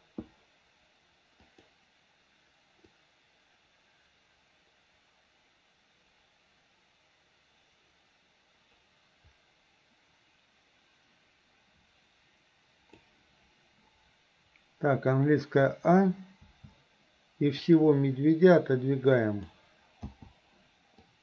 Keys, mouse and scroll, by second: 1.5 click, 3.0-13.1 drag, 15.7 a, 16.5 a, 17.6 click, 17.8-19.5 drag, 20.1 i, 21.1-21.2 drag.